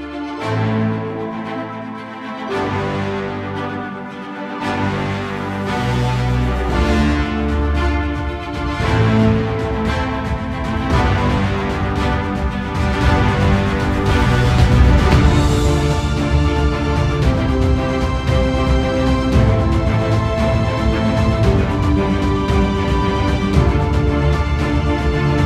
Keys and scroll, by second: 0.5 alt+space, 4.6 ctrl+alt+z, 9.8 ctrl+alt+z, 15.5 ctrl+alt+z, 22.8 ctrl+alt+z, 24.3 ctrl+z.